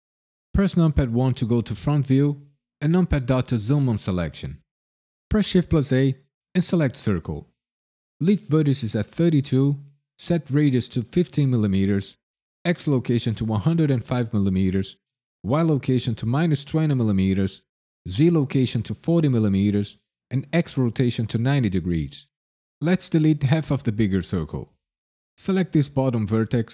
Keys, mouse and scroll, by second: 1.1 KP_1, 3.2 KP_Decimal, 9.2 click, 25.4 click, 26.4 ctrl+KP_Add.